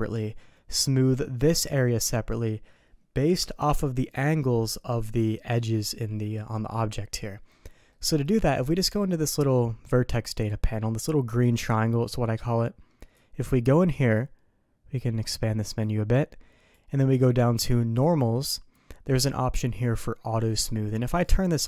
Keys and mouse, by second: 7.9 middle click, 13.3 click, 14.2 click, 15.8 click, 18.0 click.